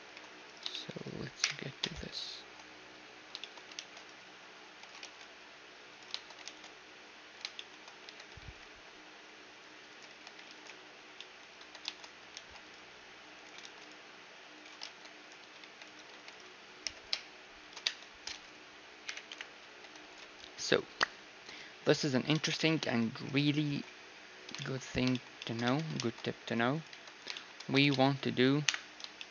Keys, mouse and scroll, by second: 0.5 click, 0.7 right click, 1.0 click, 1.4 KP_Divide, 1.4 right click, 1.8 Tab, 2.3 ctrl+3, 2.6-5.3 middle drag, 3.8 ctrl+r, 5.1 ctrl+r, 6.4 ctrl+r, 7.5-9.6 middle drag, 8.0 Tab, 8.3 t, 10.1-11.8 drag, 10.1 t, 10.4 ctrl+s, 11.1-14.5 middle drag, 11.6 Tab, 12.3 ctrl+r, 13.8 ctrl+r, 14.8 ctrl+Tab, 15.4-16.8 typing, 16.3-18.2 drag, 17.8 Tab, 18.2 middle click, 19.0 KP_Divide, 19.3 KP_1, 19.7 z, 20.0 ctrl+s, 20.4 z, 22.4 middle click, 23.2-25.1 right drag, 23.5 ctrl+2, 24.6-29.3 middle drag, 25.6 Tab, 25.9 ctrl+r, 26.9 Tab, 27.7 z, 28.6 KP_1.